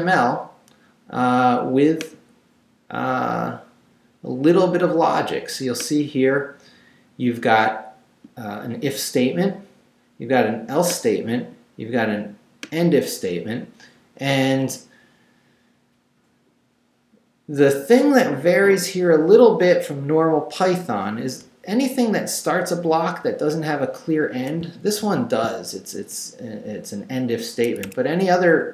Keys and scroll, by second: 22.7 Down, 23.8 Up, 24.6 shift+Up, 25.0 shift+v, 27.7 Escape, 28.5 Down.